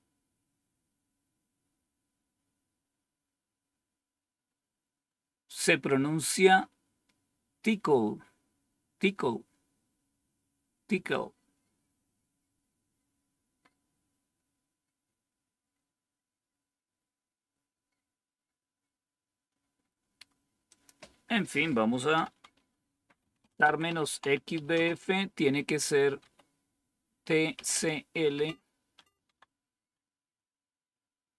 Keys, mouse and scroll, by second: 12.6-13.5 scroll down 1, 13.5-14.3 scroll up 1, 17.8-18.6 scroll down 2, 18.6 scroll down 1, 20.6 click, 22.9-25.0 typing, 26.1 typing, 27.2-28.1 typing, 28.3 Tab.